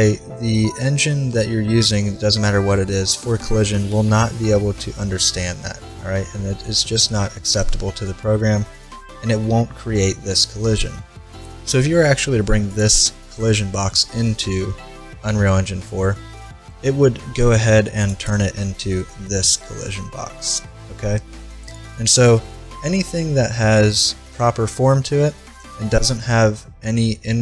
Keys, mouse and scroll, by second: 6.7-10.6 middle drag, 12.7-14.5 right drag, 18.0 right click, 18.7 middle click, 19.3 right click, 19.9-21.3 middle drag, 21.8 right click, 22.7-24.1 middle drag.